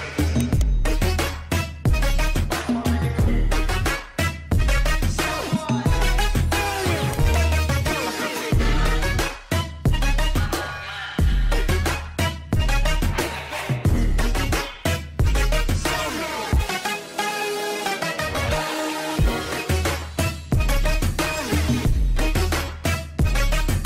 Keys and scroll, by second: 0.8 space, 1.6 alt+c, 8.8 ctrl+Page_Down, 10.3 alt+c, 11.1 F4, 14.6 shift+F2, 15.0 shift+Page_Up, 15.6 F3, 18.2 F3, 22.1 F2.